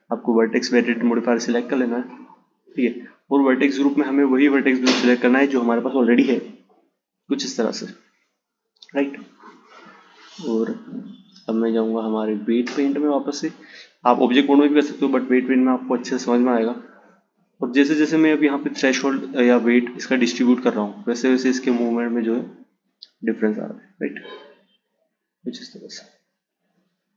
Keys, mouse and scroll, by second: 2.1-5.1 drag, 7.6 Tab, 8.3 Tab, 10.3-13.3 drag, 15.7-18.8 drag, 24.0 click, 25.6-27.1 drag.